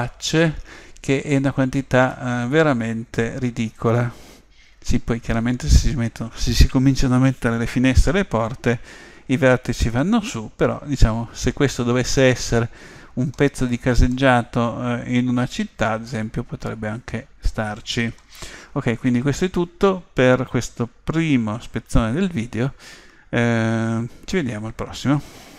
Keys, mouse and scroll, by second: 2.1-4.0 middle drag, 9.9-18.0 middle drag, 11.7-12.2 scroll down 1, 18.5-19.3 scroll up 1, 19.3-20.4 scroll up 1, 20.4 scroll up 1.